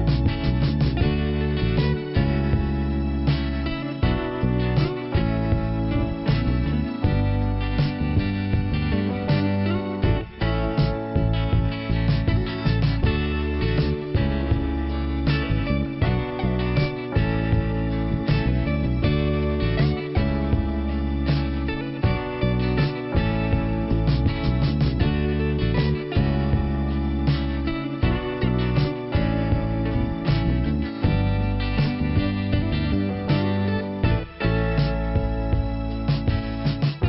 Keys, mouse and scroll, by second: 1.4 click, 2.3 click, 3.1 right click, 4.2 click, 4.8 click, 5.5 click, 5.9 click, 6.5 click, 7.6 click, 7.7 click, 8.4 click, 8.5 click, 12.4 click, 12.5 click, 13.4-13.7 scroll down 1, 15.5 click, 16.5 ,, 18.2-19.8 scroll up 2, 20.6 click, 20.7 click, 21.4 click, 21.5 click, 22.0 scroll up 1, 26.4 click, 26.6 click, 26.9 right click, 27.1 right click, 28.3 click, 28.4 click, 29.1-29.9 scroll down 1, 30.0 p, 33.1 click, 35.2 middle click, 36.0-36.7 scroll up 1, 36.7 click.